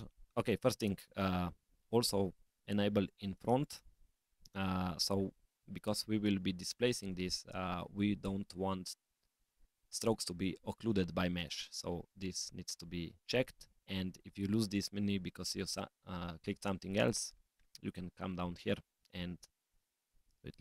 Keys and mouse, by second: 3.1 click, 3.7 click, 16.9 click, 20.0-20.6 drag.